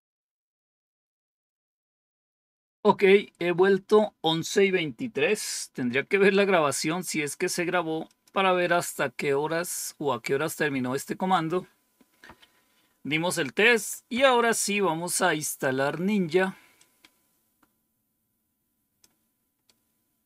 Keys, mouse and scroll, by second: 7.9 click, 11.2 click, 12.2 Up, 14.0 Down, 16.6-18.9 drag, 19.6-20.2 right drag.